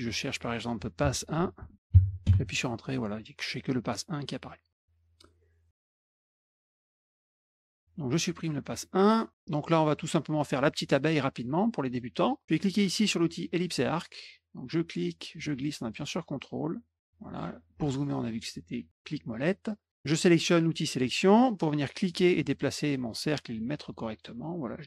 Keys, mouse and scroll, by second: 0.7-2.0 typing, 2.2 Return, 5.0 click, 5.8 click, 6.1 click, 6.4 click, 6.4 click, 6.6 click, 6.7 ctrl+z, 6.9 click, 7.1 click, 7.4 click, 8.0 click, 8.7 middle click, 9.2 middle click, 9.4 middle click, 9.8 middle click, 10.3 middle click, 14.1 middle click, 15.2-17.0 ctrl+drag, 17.6 scroll up 2, 17.9 middle click, 21.0 click, 22.0-24.8 drag.